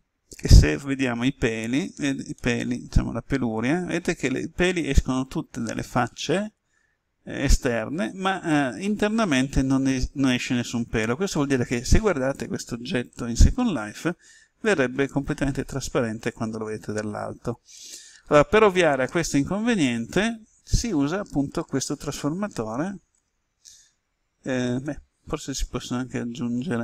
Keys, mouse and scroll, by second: 2.3-19.6 middle drag, 23.1 Tab.